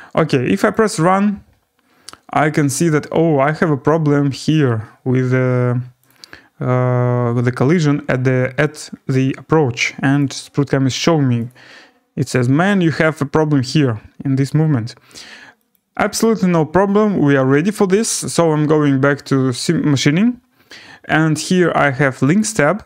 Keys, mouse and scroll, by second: 0.7 click, 3.8 scroll, 6.1 click, 8.4-10.0 scroll, 10.2 click, 11.5 click, 12.3 click, 13.1 scroll, 15.7 click, 22.4 click.